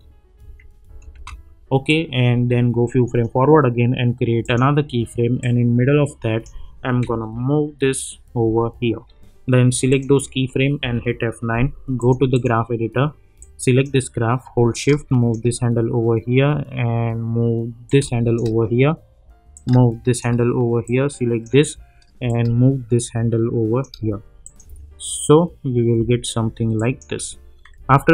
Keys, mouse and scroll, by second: 1.9-7.0 drag, 7.0 Up, 9.9 click, 10.8 F9, 12.0-16.2 drag, 16.2 -, 17.8-21.4 drag, 21.4-24.4 drag, 24.6 space, 26.8 click, 27.9 =.